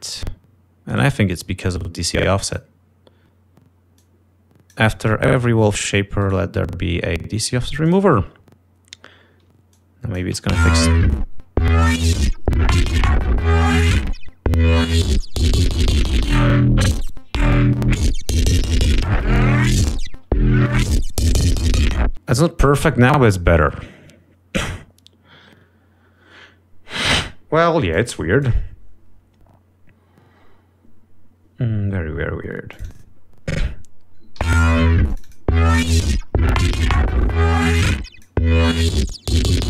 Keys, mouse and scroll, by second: 0.0 click, 1.4 right click, 2.9 click, 4.6 click, 6.7 right click, 8.3 click, 10.1 click, 10.7 space, 11.6 ctrl+scroll up 2, 13.4 ctrl+scroll down 2, 13.7 ctrl+scroll up 2, 15.1 ctrl+scroll down 2, 15.3 ctrl+scroll up 2, 18.0 ctrl+scroll up 2, 20.6 ctrl+scroll down 2, 22.0 space, 22.4 click, 25.5-26.1 scroll up 4, 28.9 click, 33.5 click, 35.0 l, 35.7 click, 36.8-37.3 scroll up 2, 37.8-38.9 drag, 39.3 click.